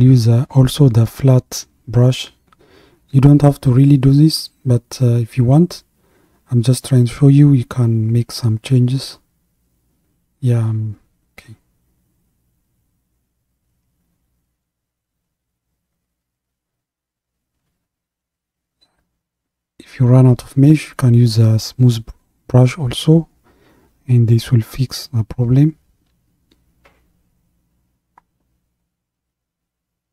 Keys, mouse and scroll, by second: 10.4-13.4 drag, 14.7-17.7 drag, 20.5-24.2 drag, 26.4-28.6 drag, 28.6-30.1 scroll down 2.